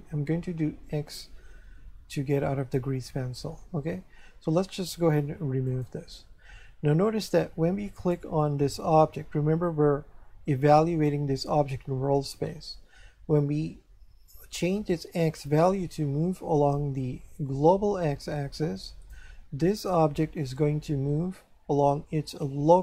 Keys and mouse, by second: 2.1 Escape, 5.7 click, 8.0 right click, 14.9 click.